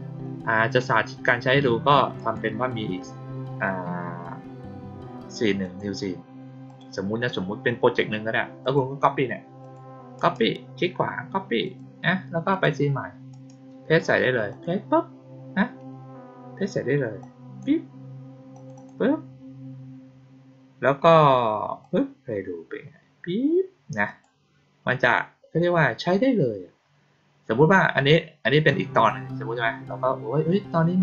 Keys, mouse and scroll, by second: 2.1 right click, 5.5 click, 6.6 click, 8.5 click, 9.5 click, 10.1 right click, 11.6 click, 12.4 click, 13.2 right click, 14.4 click, 17.1-17.5 drag, 18.4 click, 18.7 click, 21.7 click, 24.0 click, 24.9 click, 28.6 click, 28.8 click.